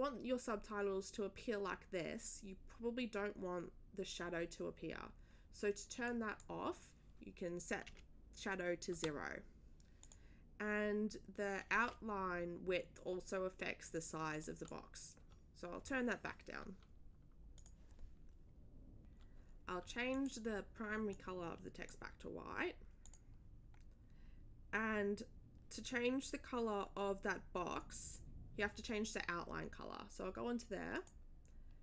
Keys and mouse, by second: 6.0 click, 10.0 click, 14.4 click, 15.2 3, 17.5 click, 20.1 click, 21.1 click, 23.0 click, 30.9 click.